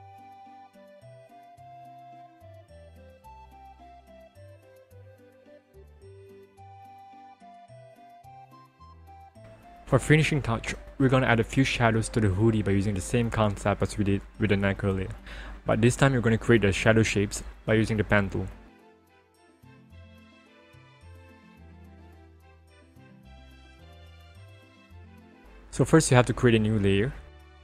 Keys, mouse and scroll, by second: 1.0-2.5 scroll up 1, 2.8 ctrl+-, 6.4 ctrl+=, 7.8-8.2 scroll, 10.0 scroll down 1, 10.1 p, 12.6-13.4 scroll down 1, 17.5 click, 23.2 click, 25.5 click.